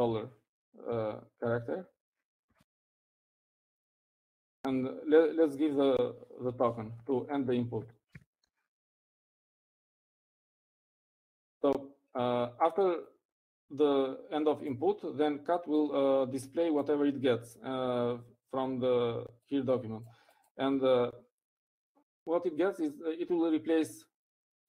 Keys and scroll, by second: 0.0-0.6 typing, 2.7-4.8 typing, 8.6-10.1 typing.